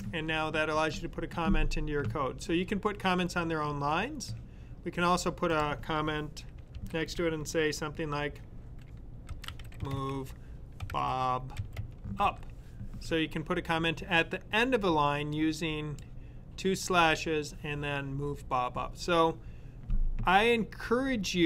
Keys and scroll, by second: 6.1-6.8 typing, 9.0-12.5 typing.